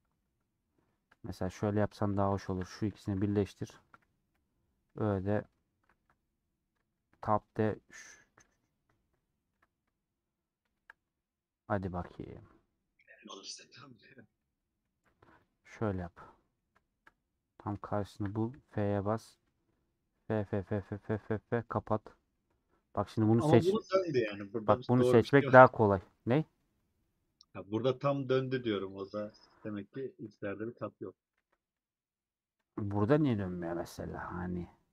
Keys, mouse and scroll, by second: 0.0-1.5 middle drag, 1.5 click, 2.1 click, 2.5 shift+click, 3.0 ctrl+j, 4.3 /, 4.5 middle click, 5.0 2, 8.2 middle click, 8.3 scroll down 1, 8.4-9.1 scroll up 2, 9.1-10.5 middle drag, 10.5 alt+shift+click, 11.1-13.8 middle drag, 13.8 scroll up 3, 14.3-15.4 middle drag, 15.4 click, 15.8-18.1 middle drag, 18.1 shift+click, 18.6-20.7 f, 20.8 scroll down 1, 21.3 middle click, 21.7 scroll up 1, 21.8 middle click, 22.6-23.1 scroll up 2, 22.7 middle click, 23.4 3, 24.4-26.0 middle drag, 26.0 ;, 30.5 click, 30.8 scroll down 2, 31.0 middle click, 31.4 3, 32.7 alt+click, 33.3 middle click, 34.2-34.6 scroll up 2.